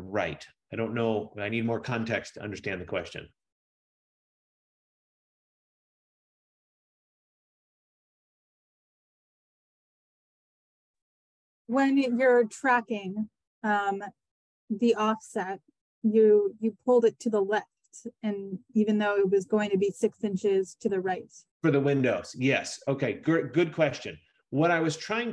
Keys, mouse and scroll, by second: 1.1 Return, 11.7 F15, 20.3-22.1 scroll, 22.1-22.5 scroll, 22.6-23.7 scroll, 23.7-24.7 scroll.